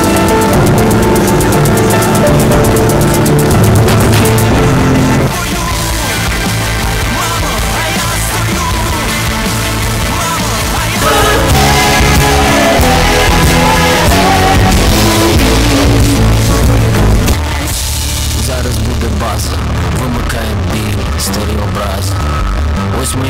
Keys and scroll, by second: 5.5 Page_Down, 17.2 Page_Down.